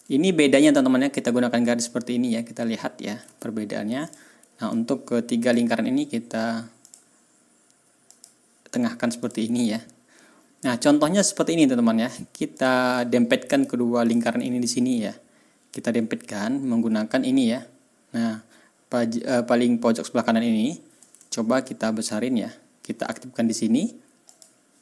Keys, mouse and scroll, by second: 0.6 ctrl+scroll down 2, 1.0 ctrl+scroll up 2, 1.6-2.0 ctrl+scroll down 2, 4.0 click, 4.6-5.6 drag, 6.8 click, 8.0 click, 9.2 click, 9.7 ctrl+scroll up 2, 10.8 ctrl+scroll down 2, 11.3-11.9 ctrl+scroll up 3, 12.5 ctrl+click, 13.0 ctrl+scroll down 1, 14.0 shift+click, 14.4-14.7 ctrl+shift+scroll down 3, 21.4-22.8 ctrl+scroll up 6, 24.2 middle click.